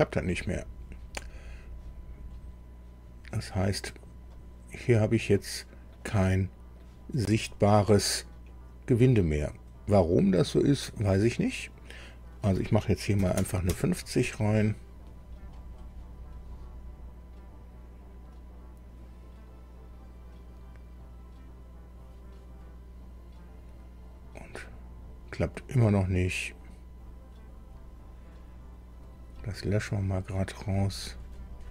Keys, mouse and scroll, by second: 4.3-6.1 middle drag, 6.2 middle click, 11.0 click, 13.2 KP_5, 13.4 KP_0, 13.6 KP_Enter, 29.0 click, 30.0 click.